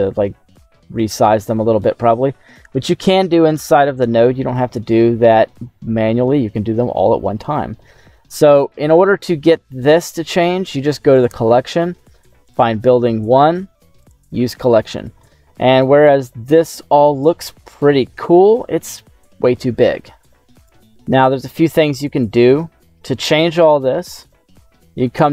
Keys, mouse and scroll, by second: 1.3 middle click, 2.1 shift+middle click, 3.0 shift+middle click, 4.6-6.1 middle drag, 6.1 scroll up 1, 6.6 scroll down 2, 8.8-9.4 scroll down 2, 11.1-12.5 drag, 13.9 click, 14.5 middle click, 15.3 scroll up 2, 15.8 middle click, 17.2 scroll down 1, 17.6 middle click, 23.8 scroll up 2, 24.1 middle click.